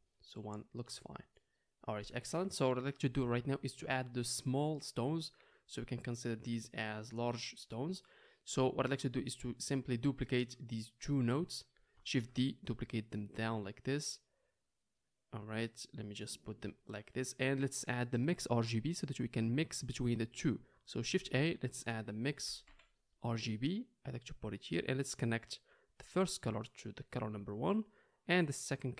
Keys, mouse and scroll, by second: 12.1 shift+d, 13.1-14.0 middle drag, 14.0 click, 14.2 middle click, 14.4-24.6 drag, 21.2 shift+a, 24.6-26.2 middle drag, 26.2-28.9 drag.